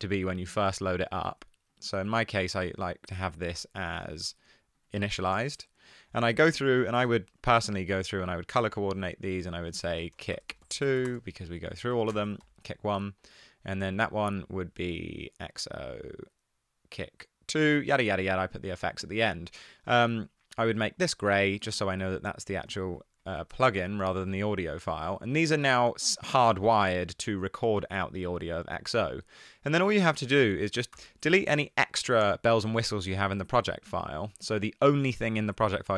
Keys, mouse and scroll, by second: 9.8 super+r, 10.3-12.4 typing, 11.9 super+r, 12.0 Right, 22.8 super+r, 23.5 Right, 23.5 BackSpace, 23.7 Return, 31.1 BackSpace.